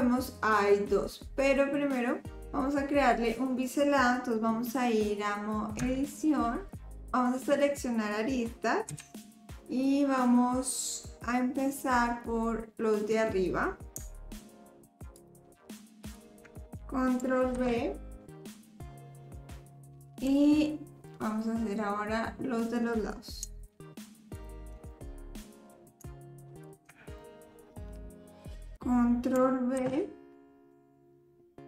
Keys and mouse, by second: 5.9 Tab, 8.9 2, 14.4 shift+click, 17.6 ctrl+b, 21.1 click, 23.6 shift+middle click, 24.4 shift+middle click, 24.9 middle click, 25.3 click, 27.2-28.4 middle drag, 29.8 ctrl+b.